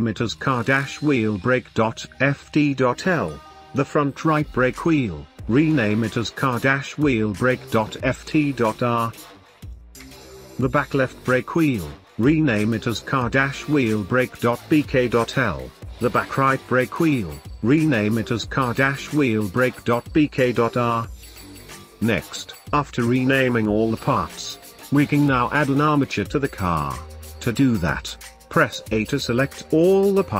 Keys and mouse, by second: 1.4 F2, 4.4-4.8 middle drag, 5.4 click, 7.0 F2, 10.6 F2, 16.0 F2, 20.5 shift+middle click, 22.0 click, 25.6 click, 29.1 middle click, 29.1 a, 29.8 a.